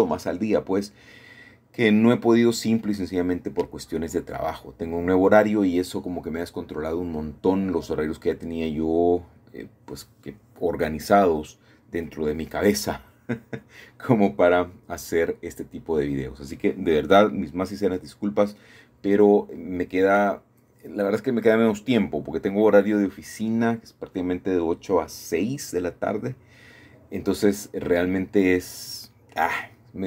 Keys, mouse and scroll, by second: 0.0-1.0 drag, 0.8-2.4 middle drag, 2.6 middle click, 3.2 middle click, 3.4 middle click, 3.6-6.3 middle drag, 6.3-7.5 scroll down 4, 7.5-9.0 shift+middle drag, 11.3-12.4 scroll up 2, 11.8-15.2 shift+middle drag, 15.9-16.3 scroll down 2, 16.3-16.7 scroll up 1, 16.7-17.8 scroll down 1, 17.8-18.3 scroll up 1, 18.3-18.9 scroll down 1, 18.9-20.2 scroll up 1, 20.2 shift+middle click, 21.4 Tab, 22.6 a, 22.7 a, 25.6-26.4 scroll down 2, 26.2-27.2 middle drag, 28.3-30.0 shift+middle drag.